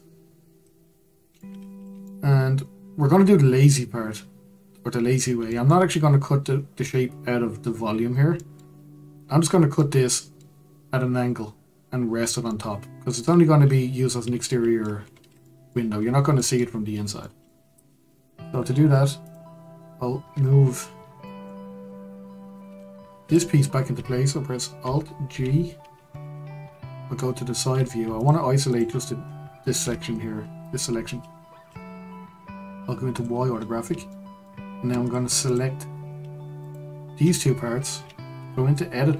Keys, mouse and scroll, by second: 1.5-2.0 scroll down 3, 2.0-5.1 middle drag, 5.5-15.0 shift+middle drag, 15.0-15.4 scroll up 2, 15.4 middle click, 16.0-16.4 scroll down 3, 16.4-17.6 middle drag, 17.6-19.2 scroll up 2, 19.2-20.3 drag, 20.3-21.2 scroll down 2, 21.2-22.6 middle drag, 22.6 Tab, 23.2 click, 25.3 alt+g, 26.1-28.1 middle drag, 28.1 shift+click, 28.7 shift+click, 29.8 KP_Divide, 33.1 click, 33.6-34.1 scroll up 1, 34.1-35.0 shift+middle drag, 35.0 click, 35.4 click, 36.6 shift+click, 38.3 Tab.